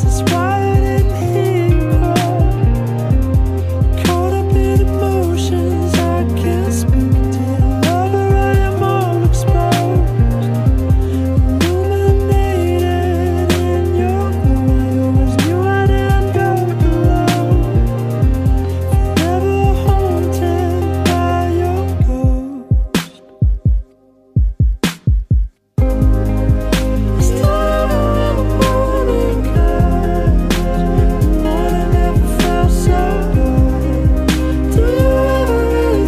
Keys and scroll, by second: 0.4 ctrl+z, 3.3 ctrl+z, 6.2 ctrl+z, 6.5 ctrl+z, 7.2 ctrl+z, 7.7 ctrl+z, 8.8 ctrl+z, 10.5 ctrl+z, 10.8 ctrl+z, 11.5 ctrl+z, 12.3 ctrl+z, 13.5 ctrl+z, 13.8 ctrl+z, 18.0 ctrl+z, 18.3 ctrl+z, 18.8 ctrl+z, 20.0 ctrl+z, 20.5 ctrl+z, 22.0 ctrl+z, 22.5 ctrl+z, 23.1 ctrl+z, 24.0 ctrl+z, 26.8 ctrl+z, 32.0 ctrl+z, 34.1 ctrl+s, 35.0 ctrl+s, 35.7 ctrl+z.